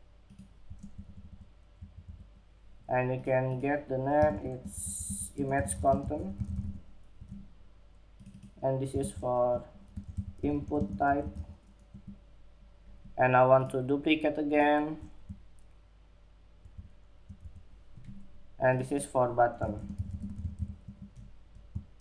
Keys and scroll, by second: 3.6 super+a, 6.5 Escape, 8.3 super+a, 11.2 Escape, 18.9 super+a, 20.1 Escape, 21.3 super+-.